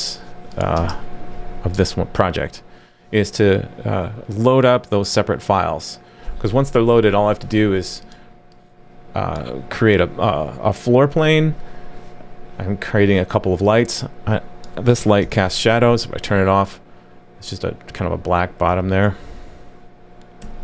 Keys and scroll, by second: 15.2 super+/, 15.4 super+s, 18.7 super+/, 20.4 super+s.